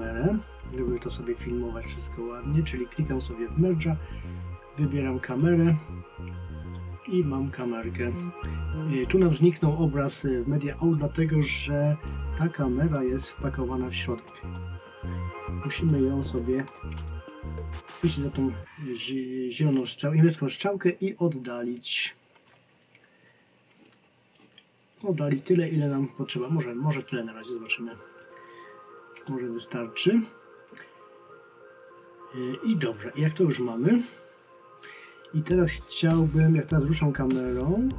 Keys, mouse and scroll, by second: 5.3 click, 12.0 alt+middle click, 19.0 click, 37.0 click.